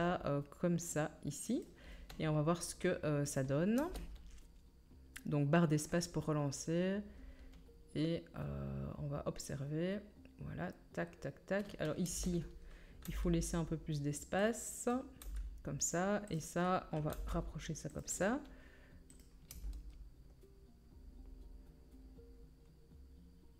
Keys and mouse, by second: 3.3-5.9 middle drag, 3.8 space, 12.0-14.9 middle drag, 12.0 space, 13.0 g, 14.9-19.1 drag, 15.2 g, 16.3 middle click, 16.3 right click, 17.1 g, 19.5 space, 19.8-23.5 middle drag.